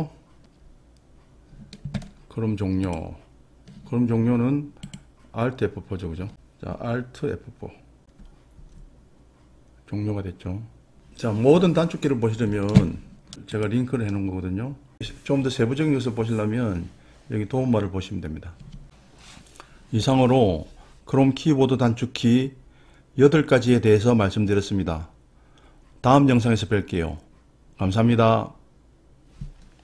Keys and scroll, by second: 8.7 alt+F4.